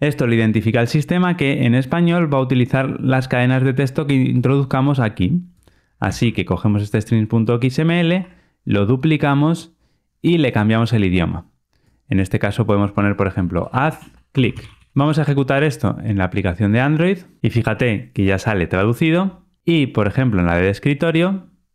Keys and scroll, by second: 5.9 super+c, 16.6 ctrl+r.